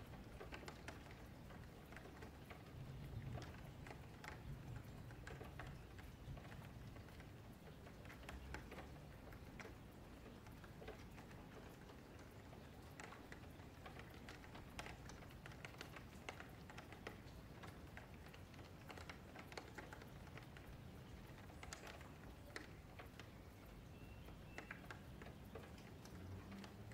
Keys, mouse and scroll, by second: 0.3 middle click, 1.2 click, 2.6 click, 2.8-5.3 middle drag, 5.3 click, 7.8-8.9 middle drag, 8.9 Tab, 9.1 click, 9.3 Tab, 9.8 click, 10.3 click, 10.4 click, 10.6 click, 10.9-11.9 middle drag, 11.9 F2, 12.9 F3, 13.2 middle click, 13.6 Tab, 13.7 click, 13.9 Tab, 14.1 3, 14.4 click, 14.7 q, 15.1 click, 15.7 click, 16.1 click, 16.3 click, 16.5 middle click, 16.9 click, 17.5 scroll up 3, 17.8 middle click, 18.3 Tab, 18.5 click, 18.7 Tab, 19.0 3, 19.2 click, 19.6 q, 20.4-21.7 scroll down 1, 21.7 Tab, 22.0 click, 22.2 Tab, 22.5 middle click, 23.0 F3, 23.4 1, 23.8 middle click, 24.3 click, 25.8 click.